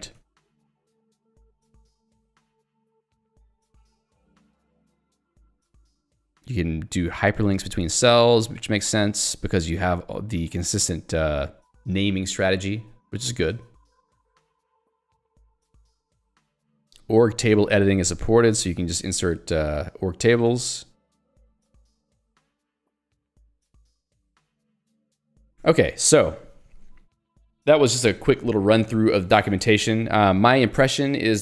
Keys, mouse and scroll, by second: 0.3 ctrl+d, 9.5 k, 10.9 l, 11.5 j, 12.8 ctrl+d, 16.9 j, 18.9 k, 20.1 j, 20.7 ctrl+d, 23.8 j, 25.3 ctrl+d.